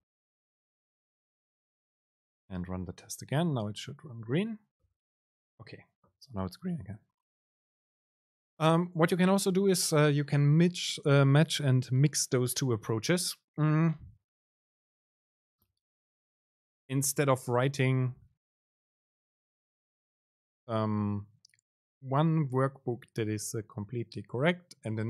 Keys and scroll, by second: 4.5 super+r.